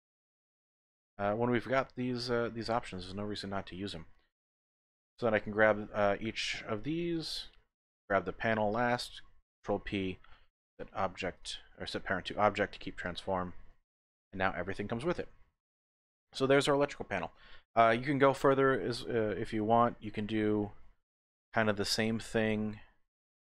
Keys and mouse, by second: 1.0 middle click, 2.3-4.1 middle drag, 4.4 click, 4.5 typing, 5.3 shift+click, 6.1 shift+middle click, 8.0 shift+click, 9.8 ctrl+p, 11.3-14.1 typing, 12.2 click, 13.0 click, 15.1 click, 15.4-19.8 drag.